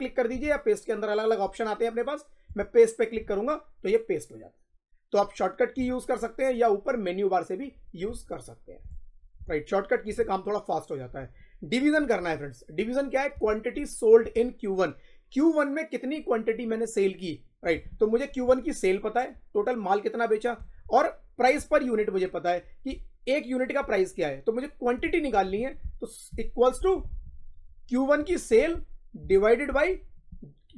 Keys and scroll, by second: 26.2 =, 29.1 /.